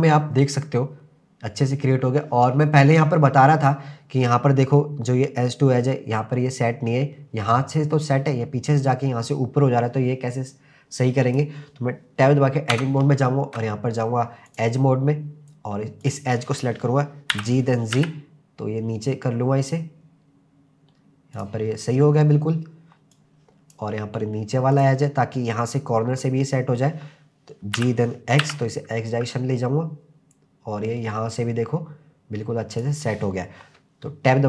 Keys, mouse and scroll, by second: 1.9-3.0 scroll up 2, 3.0 click, 10.3-11.0 scroll down 2, 11.0 click, 12.7 Tab, 14.5 click, 15.0-15.5 scroll up 1, 16.0 click, 17.3 g, 18.0 z, 21.4 click, 21.8-23.1 scroll down 2, 23.1 click, 24.7 click, 26.6-27.8 scroll up 1, 27.8 g, 28.4 x, 32.7 click.